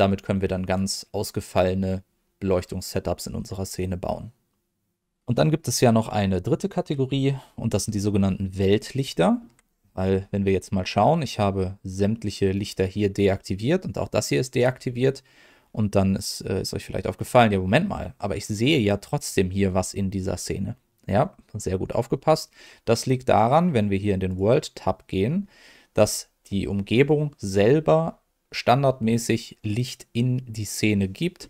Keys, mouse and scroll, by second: 0.7 click, 7.8-8.5 scroll down 1, 8.5 middle click, 9.1 shift+middle click, 24.2 click.